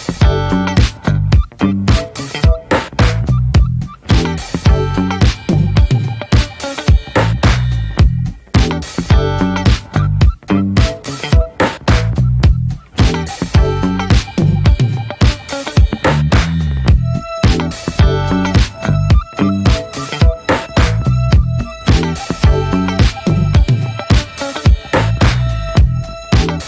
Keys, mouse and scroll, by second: 0.1 scroll up 1, 0.2-0.8 scroll down 2, 0.4 middle click, 0.8 middle click, 1.6 click, 1.8 click, 1.9 middle click, 2.2 ctrl+s, 2.7 click, 2.9-3.4 drag, 3.4-3.7 middle drag, 3.7 click, 3.9 shift+middle click, 4.2 ctrl+s, 4.7 click, 4.9 scroll down 2, 5.1 middle click, 5.7 click, 6.1 click, 6.3 click, 6.7 click, 6.8 scroll down 2, 7.1 alt+middle click, 7.6 scroll up 3, 7.8-14.7 shift+middle drag, 14.7 click, 15.0-15.5 scroll down 3, 15.1 middle click, 15.5 shift+middle click, 16.0 `, 16.3 scroll up 1, 16.5 middle click, 17.4 ctrl+z, 18.0 right click, 18.4-19.1 scroll up 5, 18.6 shift+middle click, 19.1-21.1 shift+middle drag, 21.1 click, 21.4-22.0 scroll down 3, 21.6 middle click, 22.0 shift+middle click, 22.5 ctrl+z, 26.0 click.